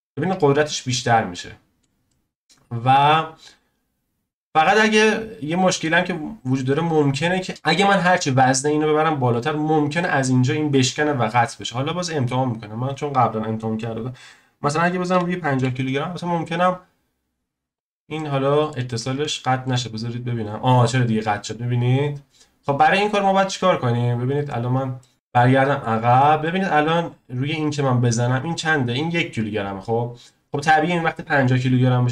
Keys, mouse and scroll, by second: 3.1-6.9 drag, 7.5 click, 8.6 click, 9.8 click, 11.5 click, 12.8-16.0 drag, 17.7 click, 18.2-22.4 middle drag, 23.3 click, 25.0-27.0 shift+middle drag, 27.0 click, 30.5 click.